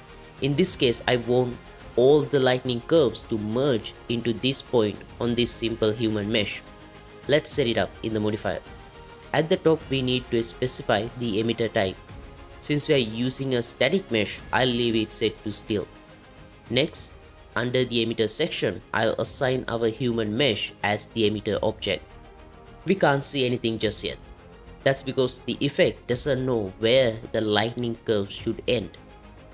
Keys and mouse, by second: 12.5-14.3 drag, 16.8 click.